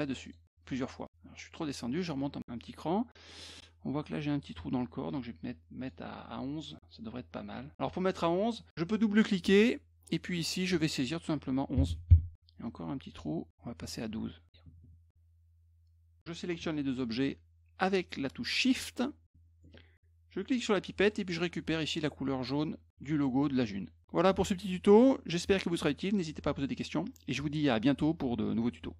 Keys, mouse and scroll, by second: 0.2 click, 0.7 click, 1.9 click, 3.3 middle click, 3.3 scroll up 2, 3.5 middle click, 5.8 right click, 7.8 click, 9.1 click, 9.2 click, 10.7 click, 13.9 click, 18.7 shift+click, 20.7 click.